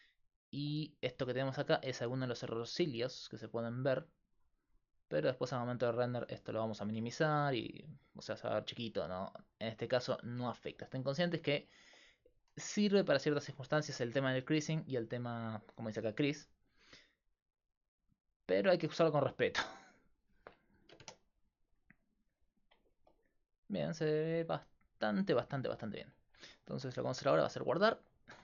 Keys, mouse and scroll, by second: 5.7-6.8 drag, 6.5-7.5 middle drag, 17.4-21.7 drag.